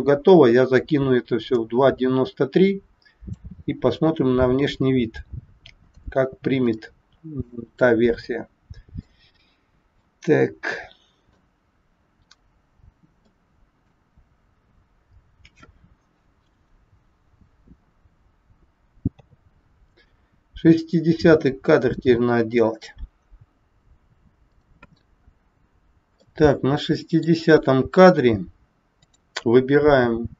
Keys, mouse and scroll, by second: 5.0-5.4 scroll up 1, 6.1 scroll down 1, 6.8 shift+middle click, 8.1 middle click, 9.9 scroll up 1, 10.0 middle click, 13.3 shift+middle click, 19.2 a, 26.2 middle click, 28.9 click.